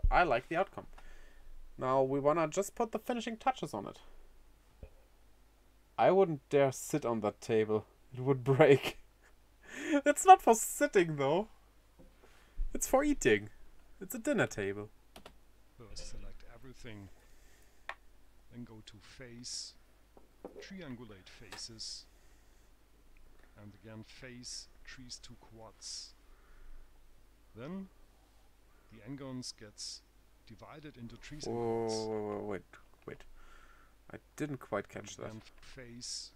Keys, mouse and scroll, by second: 16.4 click, 17.6 a, 19.5 click, 23.9 click, 28.3 click, 35.6 a.